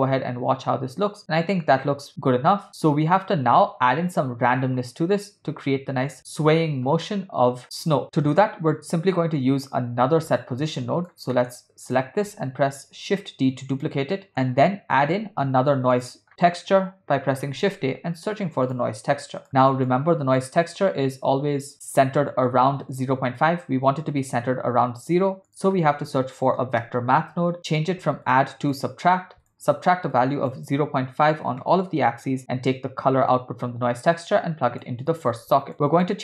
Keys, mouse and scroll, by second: 5.5 space, 7.1-8.5 middle drag, 9.2 click, 10.4 click, 11.3 middle click, 11.9 click, 12.9 shift+d, 14.1 middle click, 15.2 shift+a, 19.5 middle click, 19.9 click, 25.0 shift+a, 28.7-29.6 drag, 30.1-31.8 shift+drag, 33.3 click, 33.6-34.9 drag, 35.3 click, 35.9-36.2 drag.